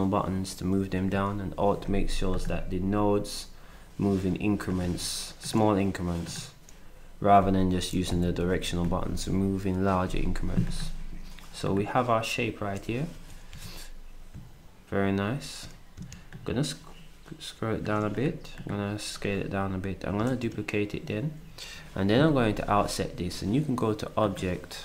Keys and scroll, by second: 4.2 s, 8.1 Left, 8.4 Right, 13.1 d, 13.5 s, 20.3 ctrl+d.